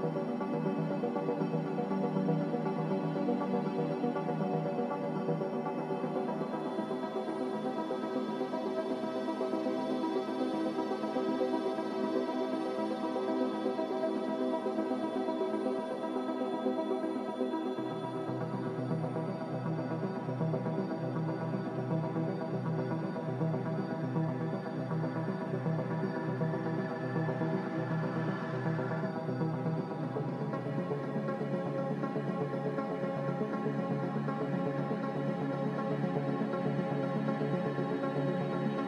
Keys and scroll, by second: 4.6-5.4 typing, 8.6 Escape, 8.6 z, 11.6 Return, 11.6 5, 15.7 g, 16.3 z, 18.4 ctrl+z, 21.7 Return, 21.7 5, 23.2 g, 25.2 z, 29.0-30.6 typing, 32.1-32.8 typing, 34.3 g, 36.3 z.